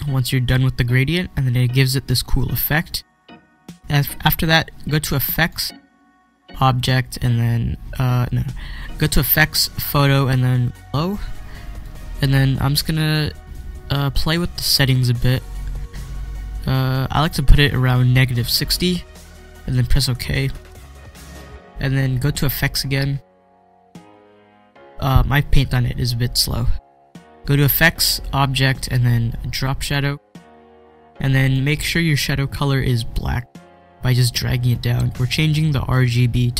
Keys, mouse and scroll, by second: 5.1 click, 5.3 click, 10.6 click, 11.6-19.7 drag, 20.1 click, 23.6 click, 29.7-36.0 drag.